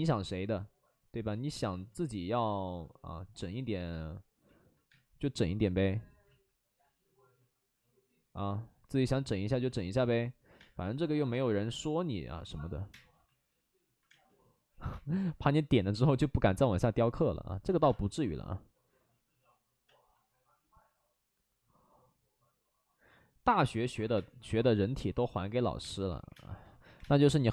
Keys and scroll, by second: 1.5 ctrl+z, 1.6 ctrl+z, 1.9 ctrl+z, 4.8 space, 6.2 ctrl+z, 10.5 space, 11.2 space, 12.3 ctrl+z, 12.5 ctrl+z, 12.7 ctrl+z, 12.8 space, 14.0 space, 14.8 space, 17.8 space, 18.6 space, 24.1 space, 25.7-27.5 typing.